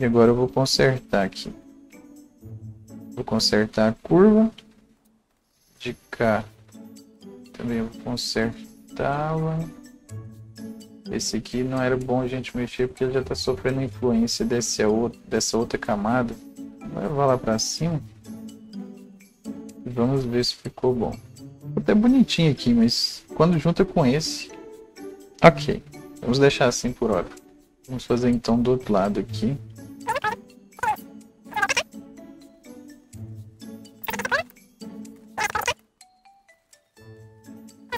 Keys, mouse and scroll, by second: 1.1 click, 2.4-9.5 alt+drag, 9.5-20.2 drag, 16.6 ctrl+z, 19.3-19.6 scroll up 1, 21.5-25.0 alt+drag, 27.7-31.7 right drag, 27.7-29.8 drag, 29.8-33.5 drag, 32.5 alt+right click, 32.8 alt+double right click, 33.7 click, 34.1-37.9 alt+drag.